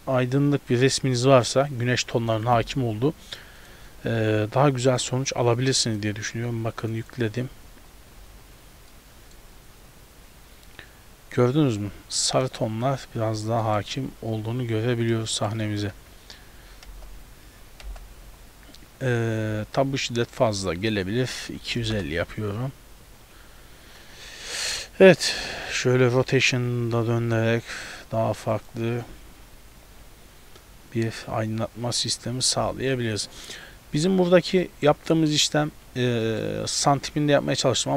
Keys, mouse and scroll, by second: 5.0 click, 7.1 click, 7.7 z, 8.2 a, 8.3 a, 9.0 middle click, 13.1 scroll down 2, 13.7 middle click, 14.1-14.4 scroll down 2, 14.8-15.1 scroll down 1, 14.8 z, 15.3 shift+middle click, 15.7 middle click, 16.0 z, 17.0 KP_0, 18.0 KP_0, 19.0-19.3 scroll down 1, 19.6 scroll down 2, 20.9 click, 24.3 shift+middle click, 24.8 right click, 25.4 r, 30.6-31.3 scroll up 2, 33.7 scroll down 1, 34.7 middle click, 34.7 scroll down 2, 36.3 middle click.